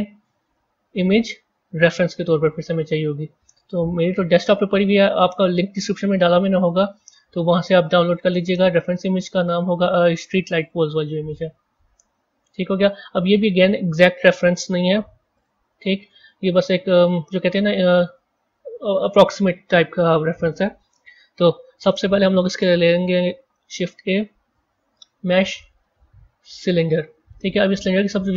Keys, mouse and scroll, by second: 11.3-12.1 scroll up 12, 13.2-13.6 scroll down 1, 13.6-14.1 scroll up 3, 14.3 scroll down 4, 15.2 click, 16.9 click, 17.7 s, 23.3 shift+a.